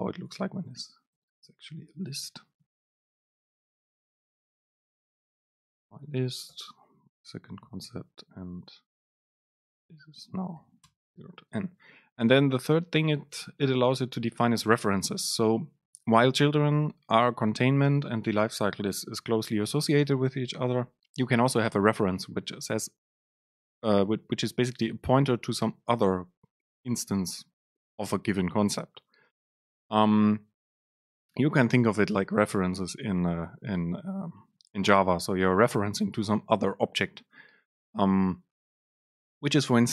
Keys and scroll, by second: 0.3 Down, 1.2 Home, 2.4 BackSpace, 6.6 super+space, 11.4 Down.